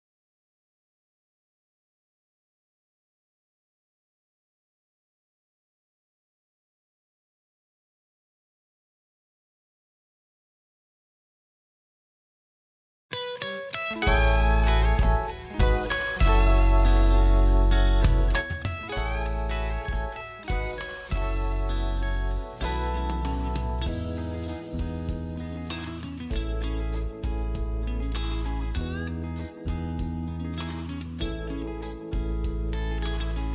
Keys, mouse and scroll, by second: 0.3 click, 14.0 space, 15.9 click, 18.4 right click, 19.0 ctrl+space, 19.5 scroll up 1, 20.0 space, 21.4 click, 23.5-25.5 scroll down 1, 25.5-26.2 scroll up 1, 27.0 click, 29.2 click, 31.9 click.